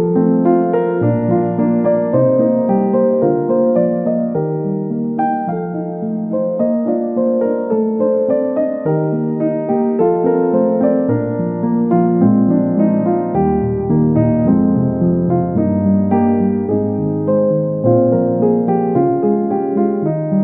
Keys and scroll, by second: 1.4 ctrl+z, 6.4 ctrl+z.